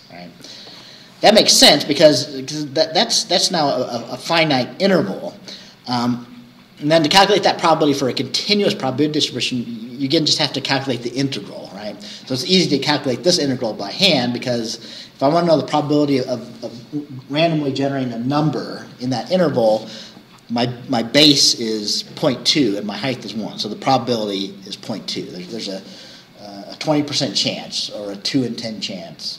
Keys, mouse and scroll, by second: 13.4-13.7 scroll down 2, 23.6 scroll down 2.